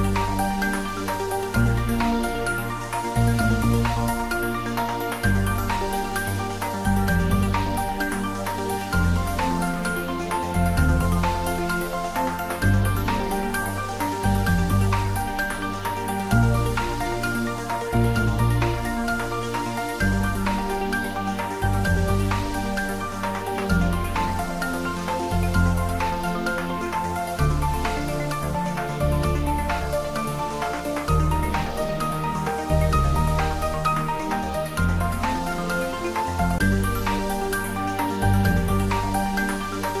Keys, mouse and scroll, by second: 0.6-1.0 scroll up 1, 1.5-2.8 middle drag, 2.8-11.0 drag, 13.2 0, 13.8 Return, 15.7 click, 17.3-18.8 typing, 19.7 Return, 24.7 Tab, 25.6 click, 26.1 Tab, 27.5-29.1 scroll down 1, 30.7 scroll up 1, 33.1-36.9 drag, 36.9-40.0 drag.